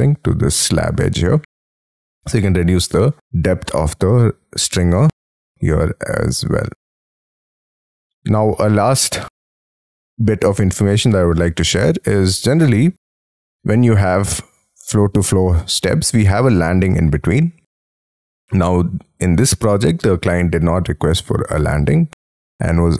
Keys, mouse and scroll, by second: 6.7 middle click, 7.4-7.7 scroll down 6, 7.7-8.3 scroll up 11, 8.5 middle click, 9.9-10.6 scroll down 6, 10.6 middle click, 18.7 middle click.